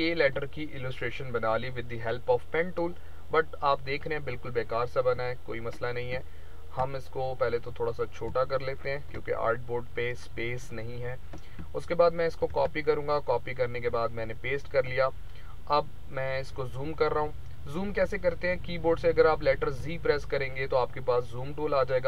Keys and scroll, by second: 11.8 ctrl+c, 12.3 ctrl+v, 19.7 z.